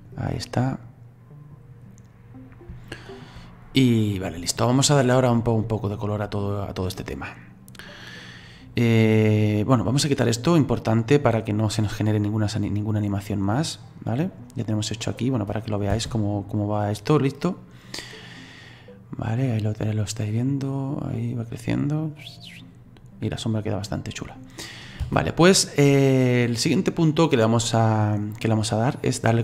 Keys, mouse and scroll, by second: 0.4-1.9 middle drag, 1.9-2.4 scroll up 2, 2.9-12.2 shift+middle drag, 12.2-15.3 drag, 15.9 space, 20.4-23.4 middle drag, 25.1 space, 25.9-29.4 middle drag.